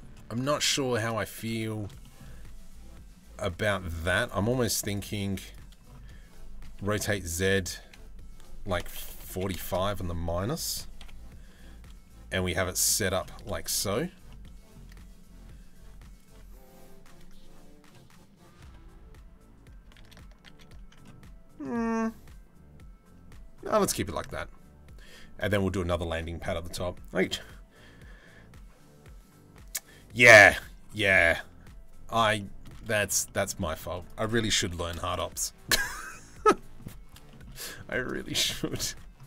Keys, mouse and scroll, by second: 1.1 Tab, 1.6 shift+middle click, 3.2 shift+middle click, 4.5 right click, 6.4 r, 10.6 KP_7, 11.1 g, 13.0-13.5 middle drag, 13.9-14.3 middle drag, 19.6 ctrl+z, 20.1 ctrl+z, 20.6 middle click, 23.5 middle click, 25.0 middle click, 32.0 middle drag, 32.8 shift+middle click, 33.0-33.7 shift+drag, 33.8 click, 34.3 g, 36.1 middle click, 36.9 shift+middle click, 37.9 click, 38.1 middle click, 38.5 Tab.